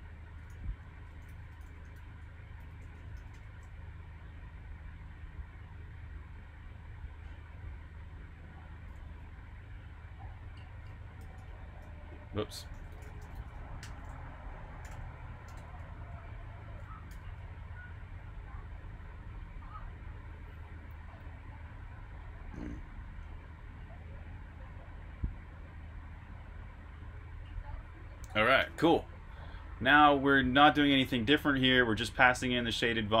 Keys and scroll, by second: 0.2-3.6 typing, 5.2 typing, 10.9-15.9 typing, 17.0 super+b, 17.0-18.2 typing, 28.6 super+r, 28.8-29.6 typing.